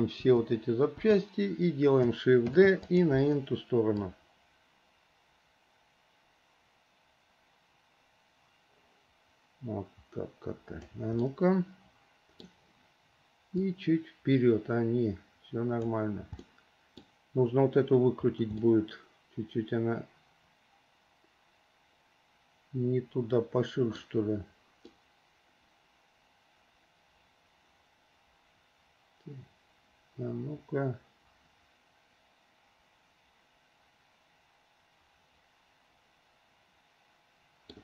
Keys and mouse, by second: 0.4 click, 1.2 click, 2.7 shift+d, 4.1-11.1 drag, 11.4-12.7 middle drag, 13.9-16.0 drag, 16.6 middle click, 18.9-24.2 middle drag, 25.1-34.7 middle drag, 34.7 click, 34.7 right click, 35.7 middle click, 36.1-37.1 drag, 36.1-37.1 right drag, 37.1 middle click.